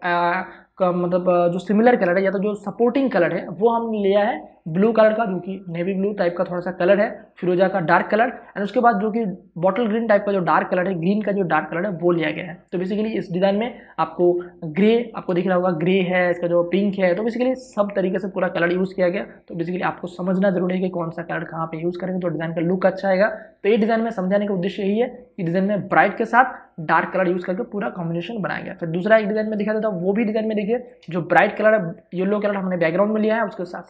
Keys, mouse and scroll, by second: 16.1 click, 24.2 click, 29.5 click, 30.1 space, 30.4 ctrl+click.